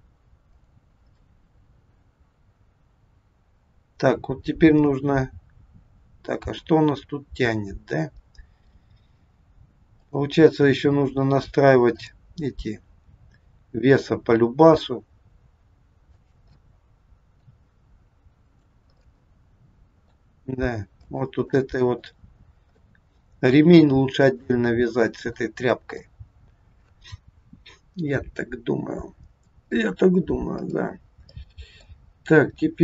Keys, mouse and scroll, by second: 0.5 click, 1.0 scroll up 1, 1.2 middle click, 4.8 middle click, 10.0 click, 11.8 click, 13.1 r, 16.5 middle click, 18.5 click, 18.8 middle click, 20.3 r, 21.5 middle click, 22.7 middle click, 24.3 middle click, 26.0 middle click, 30.6 click, 31.2 middle click.